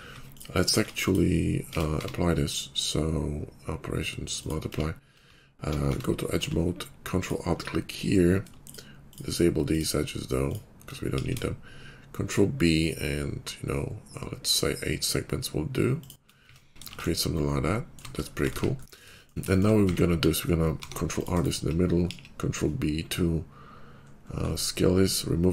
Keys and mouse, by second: 0.7 middle click, 0.9 click, 1.0-5.1 middle drag, 1.6 Tab, 1.8 q, 4.6 Tab, 5.7 Tab, 8.5 shift+middle click, 9.0 shift+middle click, 9.6 shift+click, 9.7-11.0 shift+middle drag, 11.0 ctrl+b, 11.2-17.9 shift+middle drag, 16.2 Tab, 16.8 shift+2, 18.1 middle click, 18.5 ctrl+z, 19.7 Tab, 20.6 ctrl+r, 22.0 ctrl+b, 25.0-25.5 middle drag.